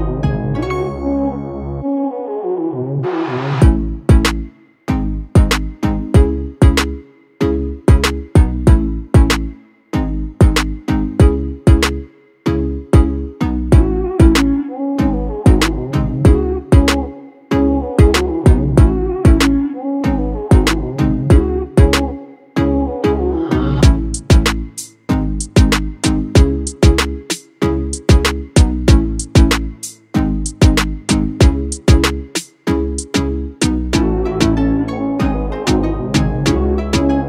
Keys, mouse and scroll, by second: 2.1-4.9 drag, 9.3 right click, 11.8 click, 15.1-16.8 drag, 20.0-24.5 alt+drag.